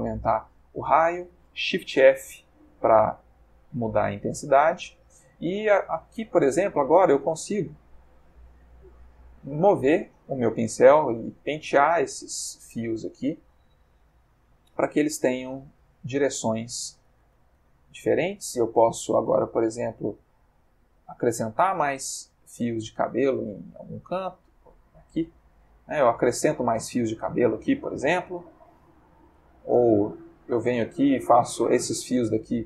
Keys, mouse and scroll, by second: 0.9 click, 2.5 shift+f, 4.4 click, 6.9-7.8 drag, 8.0-8.6 drag, 8.8-9.5 drag, 10.1 click, 10.8 click, 11.2 click, 11.7-12.9 drag, 13.9 click, 14.4 click, 15.9 click, 16.3 click, 16.7 click, 17.1-17.8 drag, 17.9-18.4 drag, 19.4 click, 20.4-22.1 drag, 22.1 f, 22.5-23.5 drag, 24.5 click, 25.2-28.7 drag, 29.5 click, 30.1 f, 30.5 click, 30.9-32.6 drag.